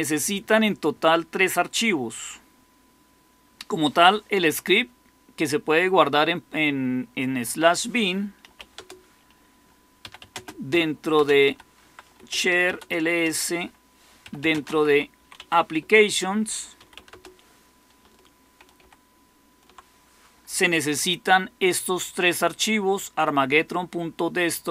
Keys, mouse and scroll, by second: 8.1-12.9 typing, 12.1 Return, 13.0 Return, 13.9-17.2 typing, 15.7 Return, 18.7 ctrl++.